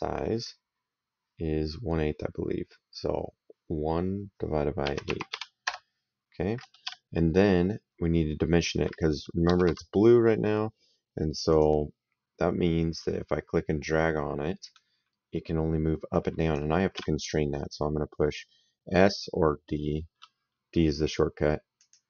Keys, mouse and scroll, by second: 4.7 KP_1, 4.9 KP_Divide, 5.2 KP_8, 5.5 Return, 5.5 KP_Enter, 6.7 s, 9.3 Escape, 11.3 click, 12.8 click, 16.8 s, 21.6 click.